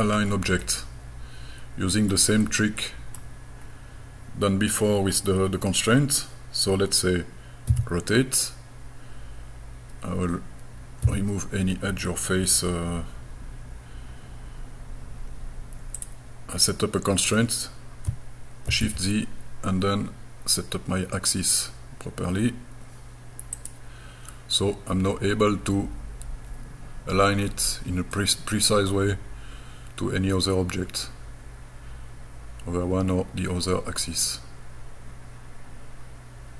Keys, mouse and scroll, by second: 0.1-0.6 scroll down 2, 0.6-2.1 middle drag, 2.4 middle click, 3.6 scroll up 2, 7.7 r, 11.0 e, 16.0-18.1 drag, 18.7 shift+z, 23.6 click, 25.3-26.3 scroll down 2, 28.2 middle click, 28.2-28.9 scroll down 2.